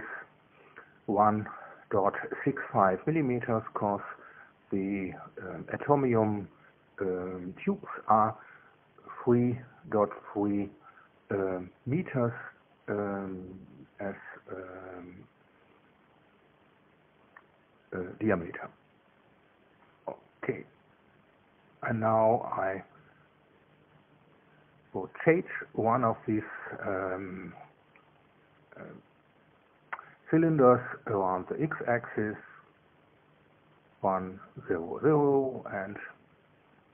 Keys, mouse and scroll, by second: 0.5 scroll down 1, 2.2 click, 6.6 KP_1, 6.9 KP_Decimal, 7.1 KP_6, 9.0 KP_5, 11.2 KP_Enter, 13.7-15.0 drag, 16.0-17.3 typing, 17.6 KP_Enter, 20.6 click, 23.5 middle click, 25.3 click, 27.1 click, 32.0 click, 33.0 click, 34.3 KP_1, 34.6 Tab, 34.9 KP_0, 35.1 Tab, 35.5 KP_0, 36.0 KP_Enter.